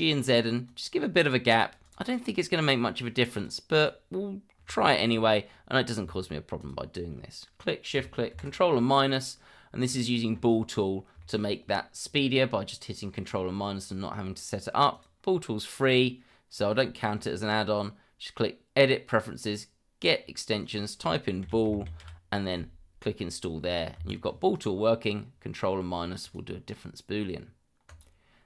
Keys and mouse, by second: 1.8 click, 3.3 click, 3.8 click, 6.6 shift+click, 8.3 ctrl+KP_Subtract, 9.4-9.9 middle drag, 11.2 shift+middle drag, 14.9 click, 26.2 click, 27.8 click.